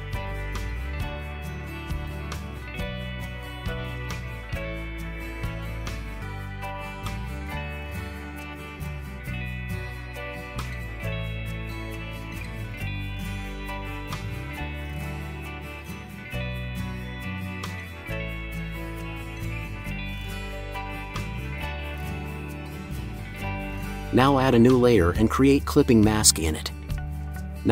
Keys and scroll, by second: 10.3 Return.